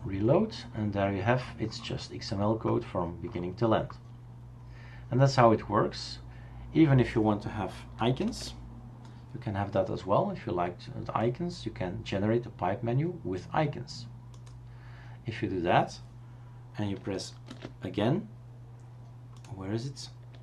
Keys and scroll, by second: 8.3 super+space, 17.5 super+space.